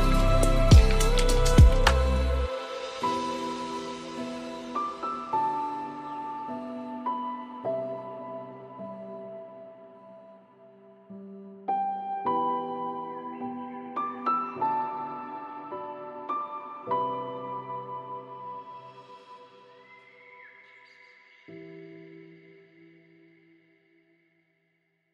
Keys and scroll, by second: 12.8 ctrl+space.